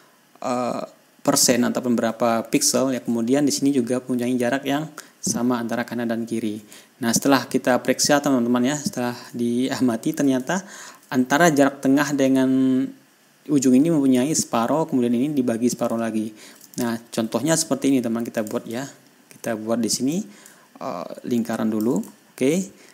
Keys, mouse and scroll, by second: 3.1-6.2 ctrl+scroll down 3, 7.3-8.3 ctrl+scroll down 2, 8.3 ctrl+scroll up 2, 8.5 ctrl+scroll down 2, 9.8-10.3 ctrl+scroll down 3, 11.1 ctrl+scroll up 2, 16.5-17.0 ctrl+scroll down 2, 17.2 ctrl+click, 18.8 click, 19.2 ctrl+scroll down 2, 19.5 ctrl+scroll up 2, 20.6-22.4 drag, 22.8 ctrl+scroll down 2.